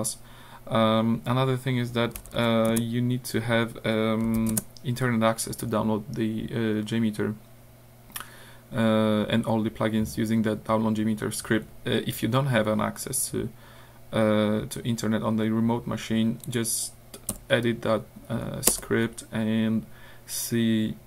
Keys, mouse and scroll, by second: 2.2 l, 2.7 Return, 4.1-4.9 typing, 16.4 click, 17.3 Up, 18.7 Return.